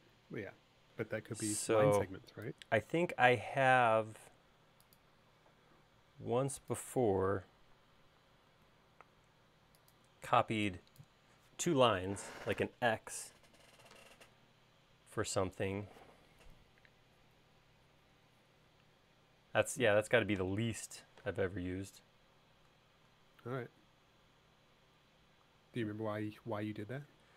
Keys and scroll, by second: 10.3 e, 21.4 p.